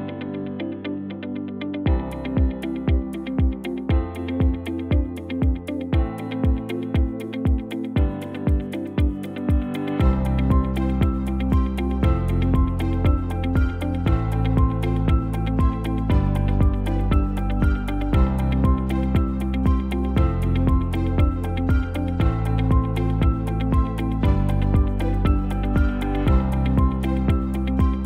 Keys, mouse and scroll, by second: 8.9 KP_7, 24.6 shift+a.